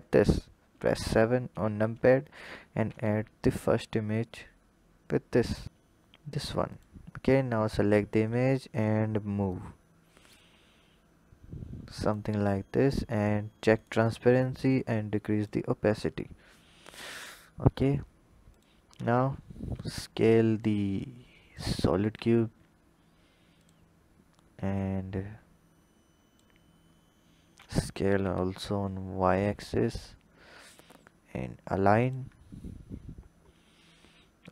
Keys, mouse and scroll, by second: 2.9 shift+a, 6.7 click, 7.2-8.6 scroll up 3, 8.6-9.6 drag, 12.9 drag, 13.8 click, 14.4-16.1 drag, 16.1-16.6 scroll up 4, 17.3-17.9 scroll up 1, 18.5 click, 19.0 scroll up 2, 19.7 s, 21.5 click, 22.5 s, 24.8 click, 27.0-27.6 scroll down 3, 27.6 s.